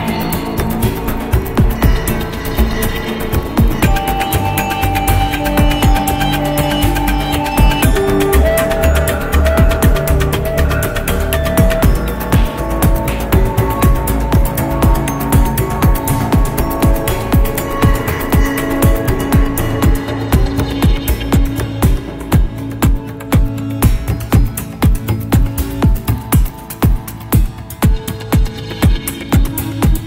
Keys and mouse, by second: 4.6 click, 5.6-10.1 drag, 12.5-19.0 drag, 19.6-25.2 drag, 26.8-27.9 middle drag, 29.3 click, 29.8-30.0 middle drag.